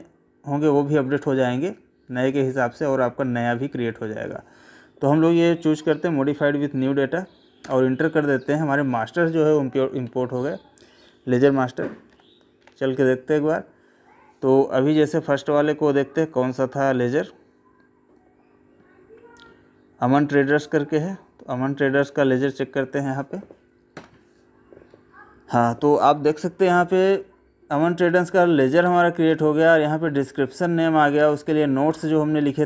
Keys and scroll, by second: 10.0 Escape.